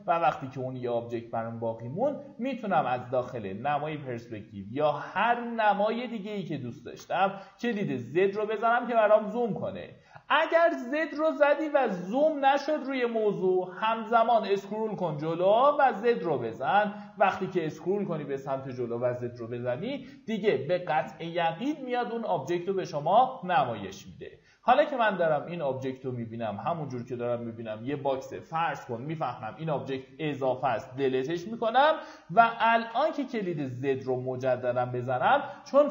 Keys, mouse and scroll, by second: 6.1 alt+w, 6.9 alt+z, 8.6 scroll down 1, 14.2 scroll up 1, 14.4-17.1 typing, 14.9 scroll up 1, 15.5 scroll up 1, 16.1-16.4 scroll up 1, 16.7-17.1 scroll up 1, 23.9-24.8 scroll down 1, 26.6-30.2 scroll up 1, 30.9 Delete, 32.8 z.